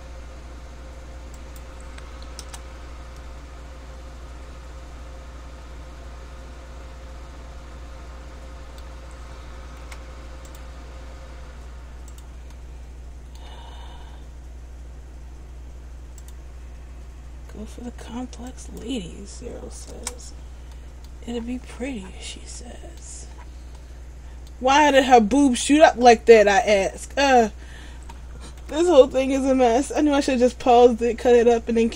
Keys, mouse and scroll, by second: 3.4 middle click, 10.0 k, 12.6 middle click, 20.9 middle click, 21.6-22.7 scroll down 4, 22.7 middle click, 22.7-23.6 scroll down 5, 23.9 middle click, 25.6 ctrl+z, 26.6 scroll up 1, 27.3 scroll up 5, 28.7 scroll up 2, 28.7 k.